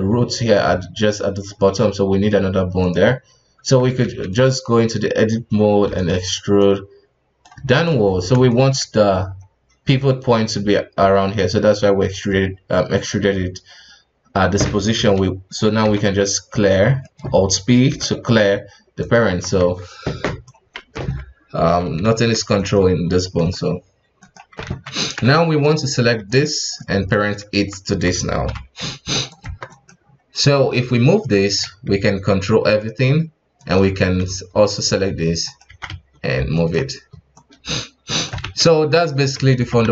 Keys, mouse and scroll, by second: 2.8 right click, 3.5 Tab, 4.0 alt+a, 4.3 right click, 5.8 e, 6.6-7.6 drag, 7.6 right click, 8.0-8.5 scroll up 1, 8.5 shift+middle drag, 8.8-11.1 shift+scroll up 7, 11.1-12.3 scroll down 2, 12.3-12.9 scroll down 5, 12.9 scroll down 2, 13.1-15.1 scroll up 1, 16.7-17.0 scroll down 3, 17.0 middle click, 17.9 alt+p, 19.2 KP_1, 19.5 Tab, 20.2 right click, 20.9 h, 22.0 ctrl+z, 22.6 right click, 23.3 right click, 23.4 g, 24.6 alt+a, 25.2 shift+z, 25.7 right click, 26.2 right click, 27.1 shift+right click, 27.8 Tab, 28.4 ctrl+p, 29.4 Tab, 29.7 right click, 30.0-30.4 scroll down 4, 30.4 r, 32.0 g, 33.6 right click, 33.9 right click, 34.5 r, 35.7 r, 37.3 right click, 38.4 shift+z, 39.2 a, 39.5 alt+r, 39.8 alt+g.